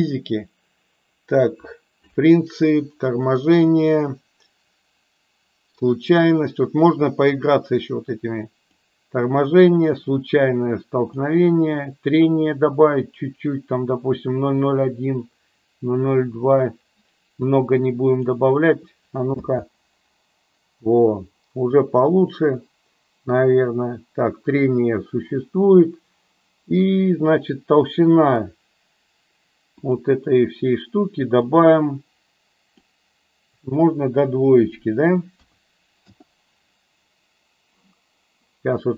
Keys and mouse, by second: 7.2-8.6 drag, 9.8-11.0 drag, 12.3-18.3 drag, 19.3 space, 29.9-36.6 drag.